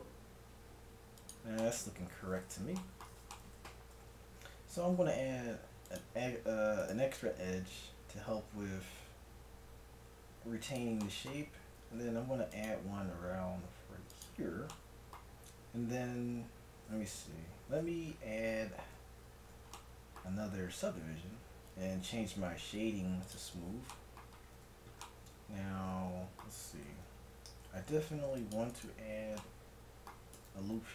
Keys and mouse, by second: 1.7-3.5 middle drag, 3.9 a, 4.8 ctrl+r, 9.0 ctrl+b, 11.9 ctrl+r, 17.8 Tab, 18.9 ctrl+1, 20.8 t, 23.4 click, 24.6 t, 26.9 Tab, 27.7 ctrl+r, 30.3 g.